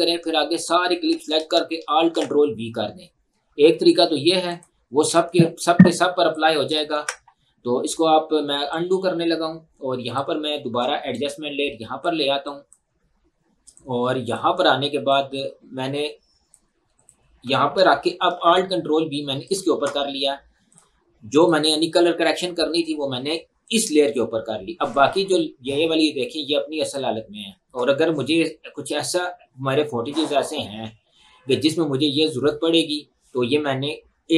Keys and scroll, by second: 2.0 ctrl+alt+v, 7.0 ctrl+z, 18.4 ctrl+alt+v.